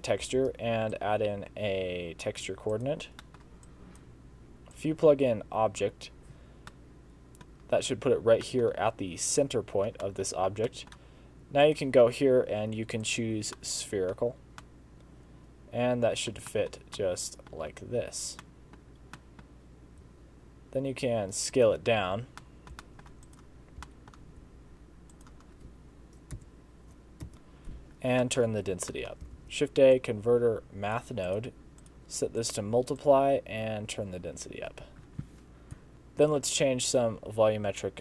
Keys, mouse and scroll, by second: 0.4 shift+a, 3.3 middle click, 3.7 click, 4.8 click, 6.7 middle click, 8.5 middle click, 10.1 middle click, 10.6 scroll down 1, 10.7 middle click, 11.1 click, 11.7 click, 13.6 middle click, 14.3 scroll up 2, 14.7 middle click, 16.5 shift+middle click, 17.0 middle click, 18.4 middle click, 18.9-19.2 scroll down 3, 19.2 middle click, 20.1 s, 22.1 alt+a, 22.3 scroll up 1, 22.4 middle click, 22.9 shift+middle click, 23.3 click, 23.6 scroll up 3, 23.9 shift+middle click, 24.4 s, 26.4 Home, 27.3 KP_0, 28.3 middle click, 28.9 middle click, 29.4 shift+a, 31.9 click, 33.1 click, 35.9 click, 35.9 s.